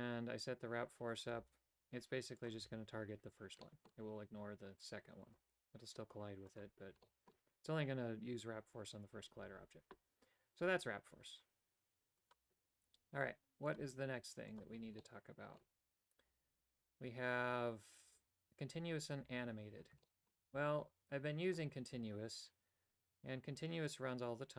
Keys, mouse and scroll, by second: 1.4 right click, 1.5 g, 2.7 a, 3.7 middle click, 5.4 right click, 5.5 g, 7.1 middle click, 7.1 a, 13.7 click, 15.0 middle click, 20.1 shift+middle click, 21.5 click.